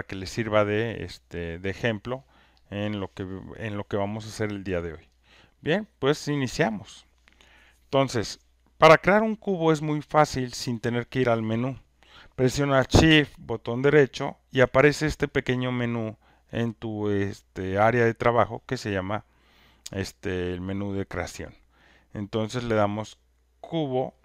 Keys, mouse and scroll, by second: 2.7 click, 23.6 right click, 23.7 click.